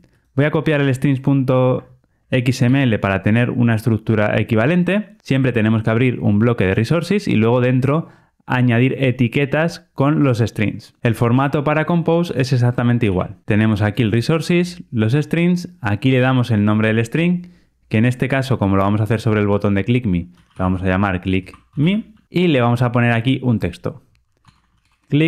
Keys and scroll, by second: 2.6 super+c.